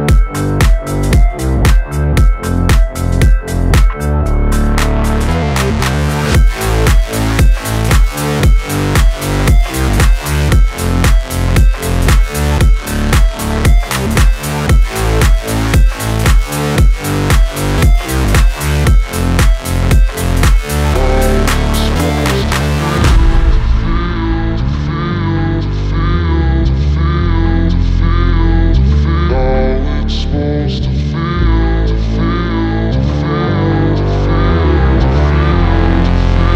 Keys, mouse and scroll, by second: 0.3 ctrl+a, 0.5 ctrl+c, 1.2 click, 1.4 scroll down 1, 2.0 r, 2.2 scroll down 1, 2.9 alt+click, 3.5 ctrl+v, 4.1 Left, 6.1 click, 6.4 space, 9.1 space, 9.4 click, 13.1 space, 15.1 click, 17.8 click, 20.9 space, 23.6 click, 27.4 click, 29.2 click, 29.4 space, 31.8 space, 32.7 ctrl+s, 33.3 ctrl+a, 33.6-36.5 drag.